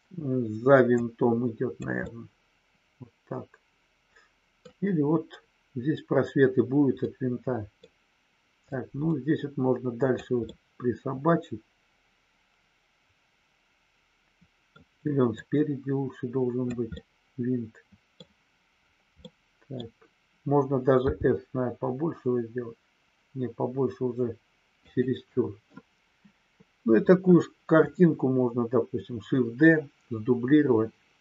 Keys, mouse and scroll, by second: 0.8-1.8 drag, 1.9 scroll up 1, 2.1-4.6 middle drag, 4.6 scroll down 1, 7.1 middle click, 8.6-10.2 drag, 10.5-14.7 middle drag, 14.7 scroll down 1, 15.3-16.7 drag, 16.9-18.2 middle drag, 19.2 middle click, 24.8 click.